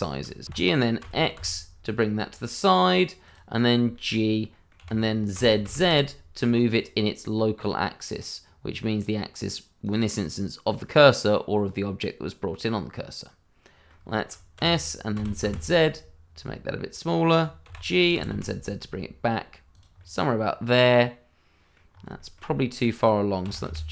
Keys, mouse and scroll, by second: 0.0 shift+middle click, 0.0 middle click, 0.1 shift+middle click, 0.4 g, 1.0 z, 1.3 x, 3.2 click, 3.5 middle click, 4.2 scroll up 1, 4.5 middle click, 4.8 g, 5.3 z, 9.8 click, 10.8 middle click, 14.2 shift+middle click, 14.5 s, 15.1 z, 17.3 click, 17.6 g, 18.1 z, 19.7 click, 20.0 middle click, 21.9 scroll up 1, 22.1 shift+middle click, 22.5 middle click, 23.4 g, 23.6 y.